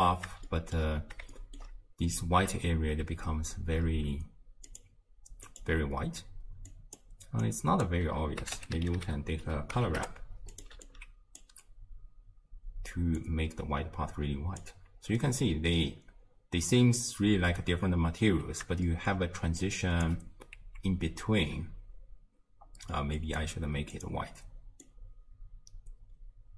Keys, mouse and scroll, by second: 0.5-1.0 shift+middle drag, 1.0-1.3 scroll up 1, 1.3-4.4 shift+middle drag, 4.9 click, 5.5 click, 6.7 click, 7.4 drag, 10.9 alt+click, 13.2-15.2 drag, 15.2-18.2 middle drag, 18.9-19.5 shift+middle drag, 19.5 d, 19.6-20.1 drag, 20.1 d, 23.0-24.0 middle drag, 24.0 click.